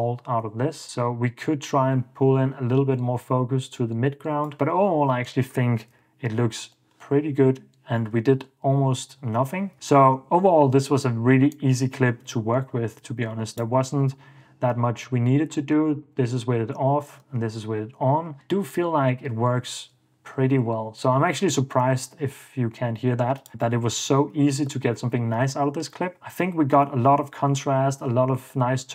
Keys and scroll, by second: 6.1 BackSpace, 8.6 super+f, 8.8 super+d, 9.2 super+d, 14.1 super+d, 15.8 super+d, 18.2 ↺, 19.8 super+s, 24.2 super+d, 25.1 super+f, 25.6 super+d.